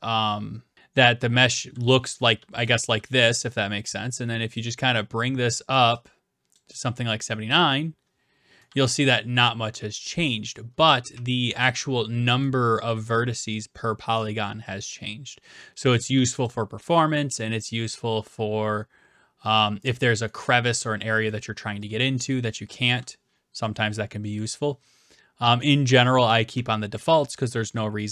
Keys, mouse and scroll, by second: 2.0-2.9 typing, 2.6 right click, 4.5 click, 6.6 click, 7.8 click, 8.7-12.4 typing, 10.8-11.8 right drag, 12.4 right click, 15.9 click, 16.5 click, 20.5 right click, 21.4 d, 21.8 right click, 22.4 a, 23.0 a, 24.6 click, 25.9-28.1 typing, 28.0 right click.